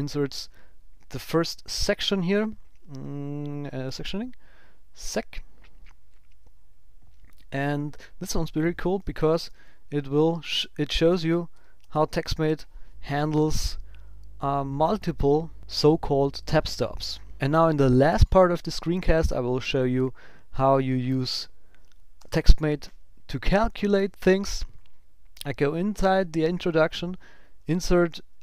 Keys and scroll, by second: 9.2 shift+i, 20.4 Up, 22.1 Tab.